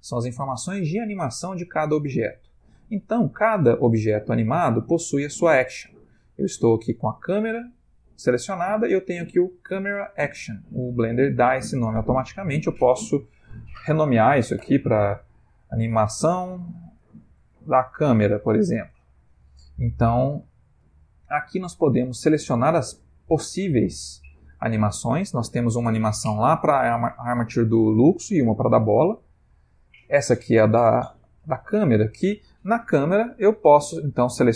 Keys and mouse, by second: 12.3 click, 22.0 click, 31.7 click.